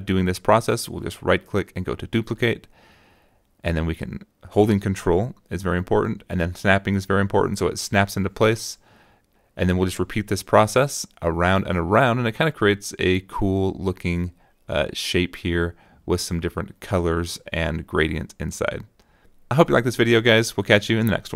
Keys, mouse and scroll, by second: 2.1 ctrl+click, 3.8-7.3 ctrl+drag, 7.8-9.6 drag, 10.3 click, 11.3 click, 11.5 right click, 11.8 click, 12.1 click, 12.4 ctrl+click, 13.1 click, 13.8 click, 14.0 click, 14.1 right click, 14.4 click, 14.7 click, 15.0 ctrl+click, 15.7 ctrl+click, 16.2 right click, 16.6 click, 17.4-18.0 ctrl+drag, 18.1 click, 18.5 click, 18.6 middle click, 19.4 click, 19.7 middle click, 20.0 click.